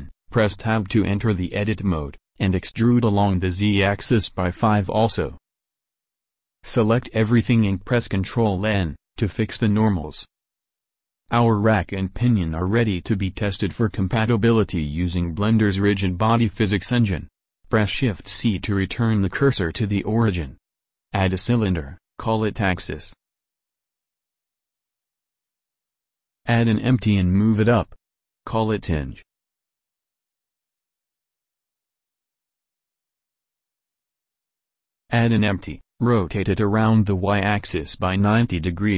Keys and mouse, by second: 1.3 click, 1.3 e, 6.2 a, 6.4 a, 7.3 ctrl+n, 11.9 Tab, 16.8 shift+c, 17.4 middle click, 20.2 shift+a, 23.5-25.6 drag, 26.6 shift+a, 29.7 s, 30.4 g, 31.9-33.7 drag, 35.2 shift+a, 37.1 s, 38.4 r.